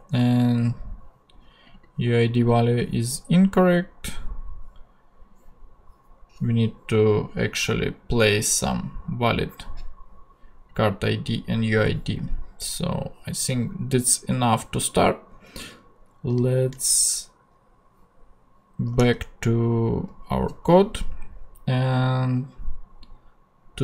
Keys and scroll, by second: 19.0 super+Tab.